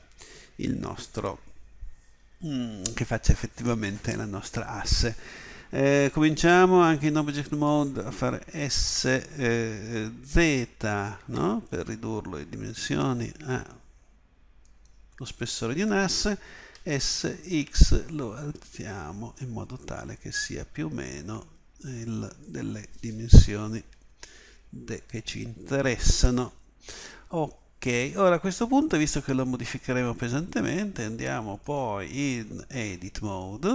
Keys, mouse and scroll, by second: 8.8 s, 16.8 s, 23.9 KP_7, 31.6-33.7 drag.